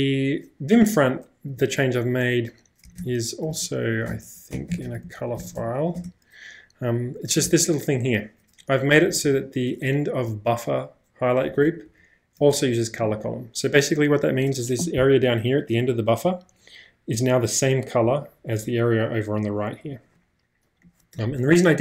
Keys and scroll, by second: 3.0-5.9 typing, 7.4 shift+v, 8.9 b, 9.1 b, 9.2 b, 11.5 w, 11.7 w, 11.9 w.